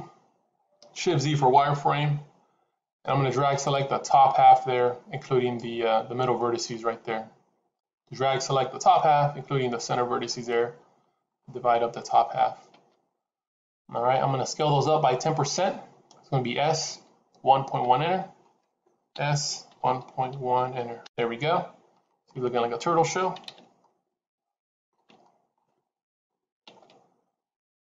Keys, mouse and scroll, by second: 0.7-1.8 scroll up 1, 1.8 shift+z, 3.3 click, 7.7 click, 19.0 s, 22.1 middle click, 23.7 shift+z, 23.8 middle click, 25.1 shift+z, 25.1 middle click, 26.0 KP_3.